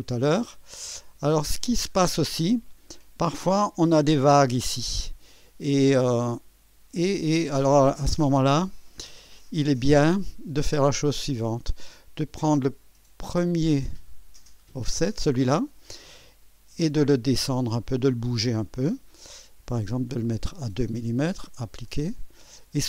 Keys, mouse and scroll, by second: 1.5-4.0 drag, 5.0-8.6 drag, 9.7 click, 12.2 click, 17.2 click, 17.9 click, 20.4 scroll down 2, 21.7 click.